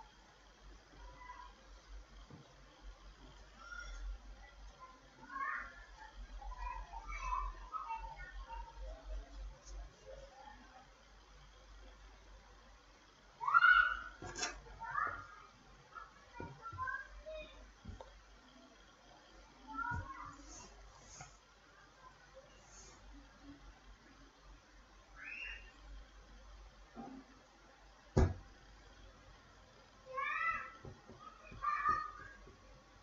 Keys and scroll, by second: 0.0-5.9 typing, 6.5 Return, 8.0 F9, 20.5 F9.